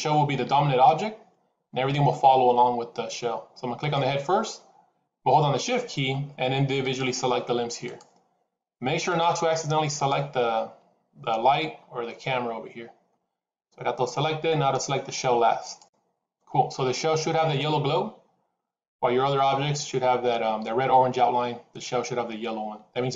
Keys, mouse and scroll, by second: 3.7 click, 15.5 shift+click.